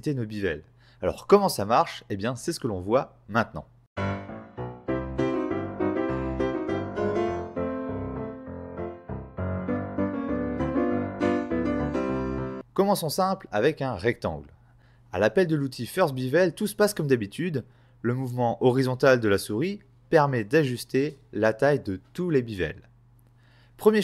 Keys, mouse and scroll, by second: 0.0 Return, 1.3 middle click, 2.1 right click, 3.3 f, 12.8 shift+click, 13.3 click, 13.7 scroll up 4, 14.5 click.